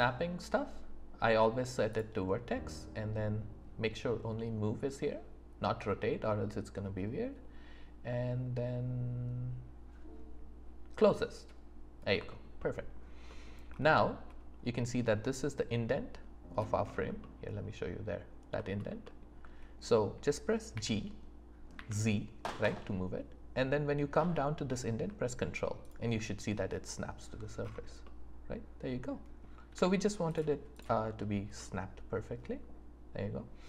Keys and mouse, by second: 12.3 alt+click, 17.2-17.6 drag, 17.2-17.6 right drag, 20.7 g, 21.7 z, 25.8 ctrl+click, 28.0 click, 28.0 right click, 28.4 middle click, 29.7 z, 31.5 click, 31.7-32.7 middle drag, 32.7 click, 32.7 right click.